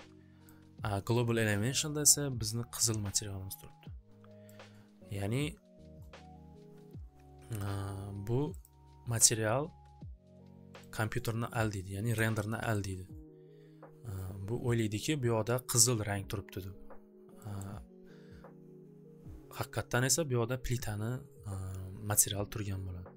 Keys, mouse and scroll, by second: 0.5-3.2 drag, 4.4 click, 8.6 click, 10.8 click, 12.7 scroll, 15.8 middle click, 16.8 scroll, 17.5 scroll.